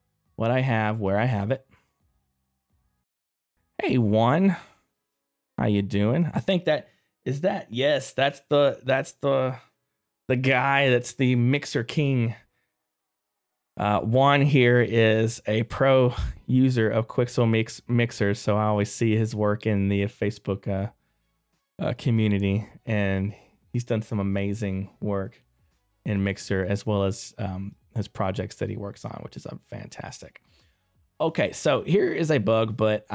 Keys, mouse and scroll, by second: 0.2 click, 1.3 middle click, 1.7 right click, 2.1 click, 5.9 right click, 12.5 middle click, 16.3 scroll up 1, 17.9 right click, 18.6 middle click, 20.7 click, 21.9 middle click, 22.3 right click, 25.2 middle click, 27.2 right click, 27.9 middle click, 28.3 right click.